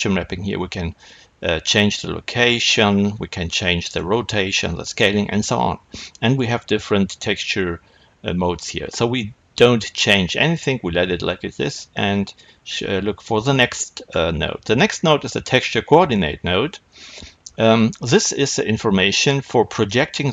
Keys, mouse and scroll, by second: 2.6-3.5 scroll up 2, 3.5-7.5 middle drag, 13.1 click.